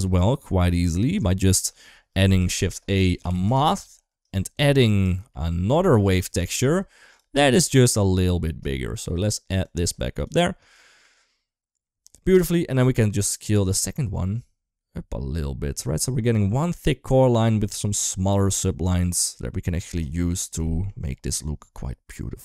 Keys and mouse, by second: 1.4 shift+middle click, 2.0 shift+a, 4.6 click, 5.2 middle click, 6.2 ctrl+shift+d, 8.5 middle click, 9.4 click, 9.6 click, 10.6 shift+middle click, 12.8-19.6 shift+drag, 20.1 shift+middle drag, 20.5 middle click.